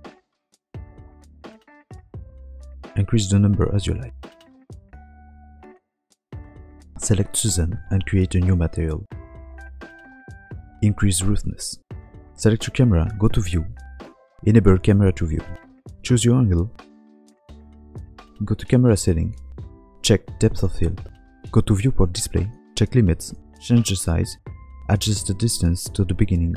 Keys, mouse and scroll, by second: 0.4 scroll down 9, 1.0 click, 1.3-2.9 scroll down 1, 2.9 click, 2.9 scroll up 10, 5.2 shift+middle click, 5.2 scroll down 4, 6.4 click, 6.9 KP_Decimal, 7.4 middle click, 8.0 click, 8.9 click, 9.8 n, 11.4 middle click, 11.4 scroll down 1, 11.7 click, 12.9 KP_0, 14.4 click, 15.5 shift+middle click, 15.8 middle click, 16.2 scroll down 2, 16.4 scroll up 2, 16.6 middle click, 17.3 shift+middle click, 18.3 click, 19.0 click, 20.3 click, 21.5 scroll down 3, 21.9 click, 22.2 scroll down 1, 23.1 click, 23.1-23.7 scroll down 5, 26.1 click.